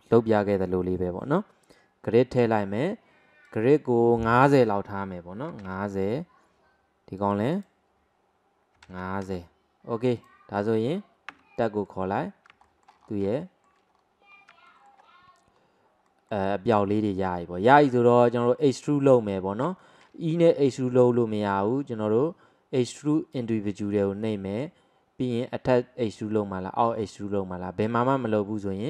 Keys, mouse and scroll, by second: 3.5-6.5 drag, 7.6-10.3 drag, 10.6 click, 11.4 Tab, 11.6-12.1 middle drag, 12.1-12.6 scroll up 2, 12.6-13.4 scroll up 4, 12.7 shift+middle click, 13.4 shift+middle click, 14.0-14.4 scroll down 1, 14.4-14.7 scroll up 2, 14.7 shift+middle click, 15.1-15.6 scroll down 1, 15.6-16.1 scroll down 1, 16.1-18.9 middle drag, 18.9-19.4 scroll down 1, 19.4-19.8 scroll up 1, 19.8-21.6 shift+middle drag, 21.6-24.6 drag, 24.7 click.